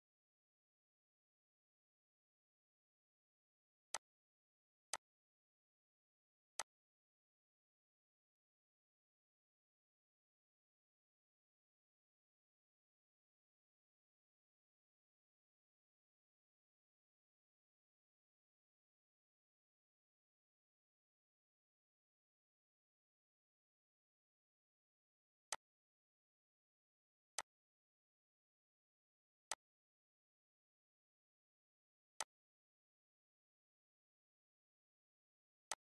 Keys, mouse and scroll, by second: 4.9 scroll down 1, 5.5 click, 6.0 scroll down 1, 7.1 middle click, 7.9 scroll down 1, 8.3 middle click, 9.4-9.7 scroll up 1, 12.4 scroll down 1, 12.7-17.6 middle drag, 17.6 scroll down 1, 18.1-24.5 middle drag, 24.5 click, 31.2 click, 33.1-34.6 shift+middle drag, 34.6 click.